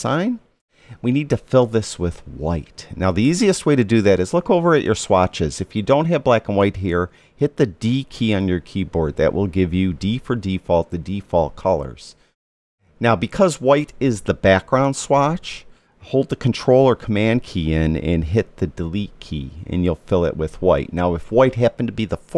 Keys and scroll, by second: 19.8 super+BackSpace.